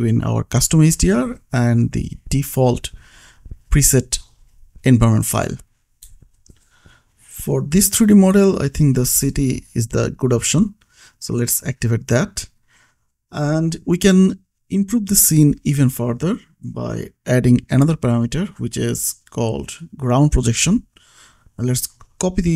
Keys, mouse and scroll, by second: 0.9 click, 2.1 ctrl+s, 2.8 click, 6.8 click, 9.1 click, 10.1 ctrl+s, 11.0 click, 16.4 click, 17.5 space, 18.3 click, 18.6-20.3 scroll down 1, 20.3-22.2 scroll up 1, 22.2 click.